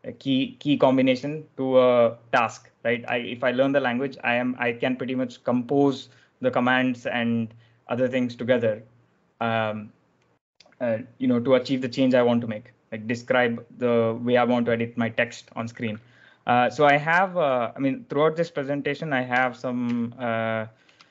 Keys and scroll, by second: 19.8 /, 20.8 BackSpace.